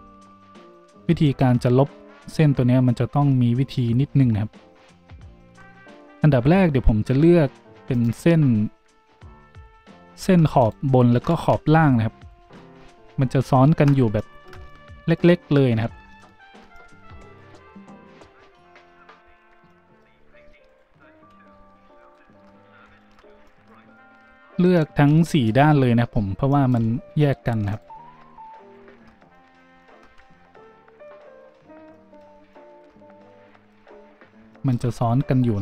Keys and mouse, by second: 4.7 g, 5.9 z, 8.2 z, 9.4 a, 10.6 alt+shift+middle click, 10.7-14.7 alt+shift+drag, 11.6 z, 12.1 alt+shift+right click, 13.0 a, 15.8 z, 18.8 z, 19.2 z, 20.4-26.4 alt+shift+drag, 20.6 alt+shift+middle click, 20.6 alt+shift+right click, 21.1 z, 22.0 alt+shift+middle click, 22.0 alt+shift+right click, 23.8 shift+z, 26.8-27.7 drag, 26.8 z, 27.7 alt+shift+middle click, 27.8 alt+shift+click, 28.6 alt+shift+middle click, 28.7-30.1 alt+shift+drag, 30.1 z, 35.1 z.